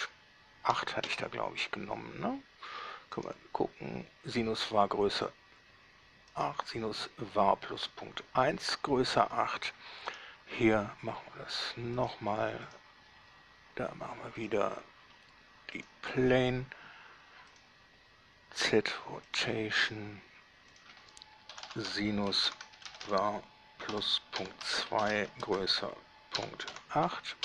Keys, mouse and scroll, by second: 0.0-0.9 typing, 1.3 Return, 3.4 click, 6.5 right click, 10.3-12.1 right drag, 12.2 click, 12.9 click, 14.7 click, 16.0 click, 17.7 click, 19.5 click, 21.0 click, 21.7-23.2 typing, 24.7-26.9 typing.